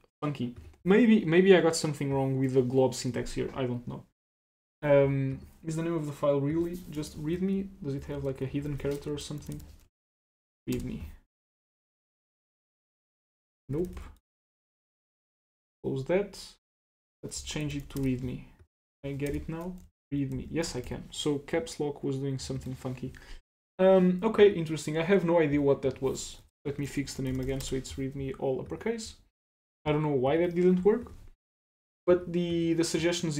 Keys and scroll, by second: 8.7 shift+super+Left, 13.6 super+c, 14.0 super+Tab, 14.4 super+Tab, 15.2 ctrl+c, 15.6 super+Tab, 22.6 ctrl+c.